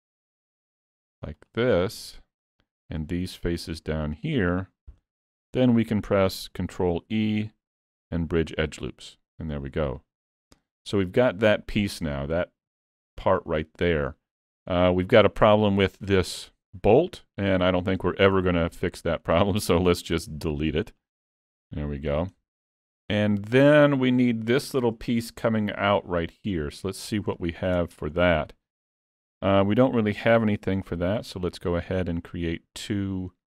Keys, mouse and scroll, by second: 0.9 shift+click, 1.2-4.6 shift+click, 7.0 ctrl+e, 10.0 middle click, 10.8 Tab, 11.1 middle click, 13.9 middle click, 14.7 scroll up 1, 15.0 shift+middle click, 15.2 shift+middle click, 17.8 click, 18.4 middle click, 20.2 x, 22.0-22.6 scroll down 3, 22.4 middle click, 24.4 scroll up 1, 24.6 shift+middle click, 27.4 click, 27.8 Tab, 28.2 middle click, 30.2 ctrl+r.